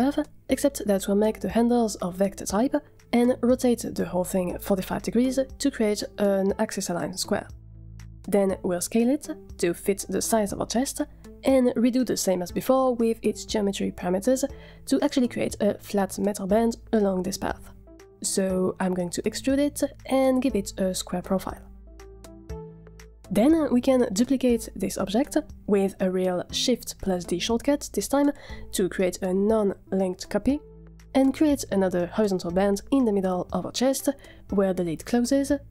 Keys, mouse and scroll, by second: 1.0 z, 1.4 Tab, 2.7 v, 4.1 r, 7.4 click, 8.4 s, 9.6 s, 11.5 middle click, 12.4 Tab, 12.8 z, 16.8-19.0 scroll down 6, 19.0 click, 19.8 scroll down 2, 19.9 click, 20.7-21.1 scroll down 2, 21.0 drag, 21.4 click, 21.6-22.2 scroll up 4, 21.7-23.3 drag, 27.9 shift+d.